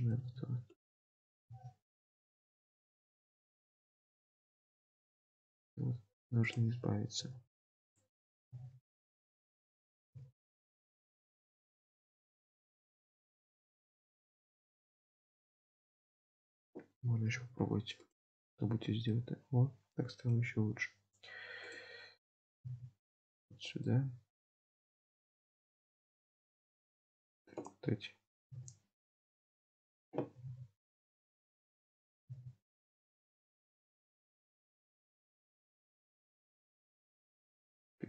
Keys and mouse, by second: 0.2 g, 1.2 click, 2.5 click, 3.9 Tab, 4.7 Tab, 6.5 click, 7.2 g, 8.3 click, 9.7 click, 11.4 Tab, 12.1-14.8 middle drag, 15.2 Tab, 16.5 click, 17.3 g, 18.5 Tab, 19.1-20.5 middle drag, 20.4 Tab, 21.7 click, 22.6 g, 23.9 middle click, 25.5-27.2 middle drag, 27.7 click, 29.7 click, 31.7 click, 33.2 Tab, 33.7-38.0 middle drag.